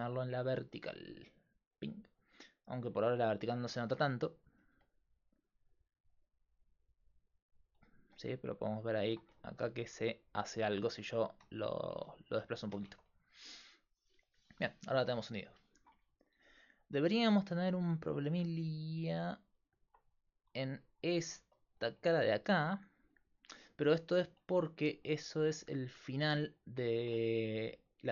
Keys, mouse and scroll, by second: 1.2-3.1 drag, 3.8 ctrl+Tab, 4.4-5.7 right drag, 4.7 g, 8.1 g, 9.4 middle click, 11.9 ctrl+z, 12.9 Tab, 22.5-23.6 d, 22.7-24.1 drag, 24.1 Tab, 24.9 a, 25.4 x.